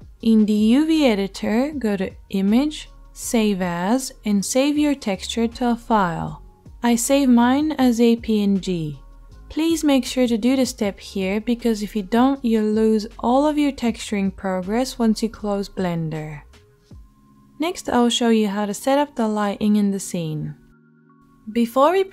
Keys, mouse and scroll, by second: 0.3-2.8 drag, 2.8-22.1 middle drag.